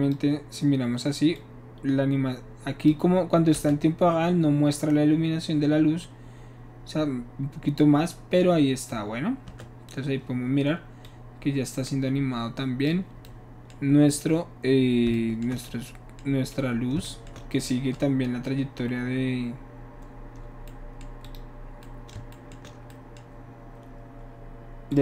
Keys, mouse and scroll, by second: 1.3-2.9 drag, 3.7 space, 9.5 space, 11.0-12.9 drag, 21.2 click, 24.9 click.